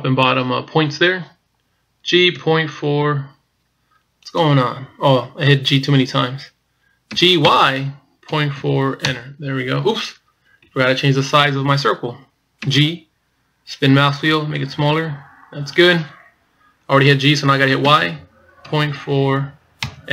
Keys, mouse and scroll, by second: 5.8-6.5 scroll up 2, 6.5-7.3 scroll down 1, 7.4 g, 10.9 ctrl+z, 12.8 g.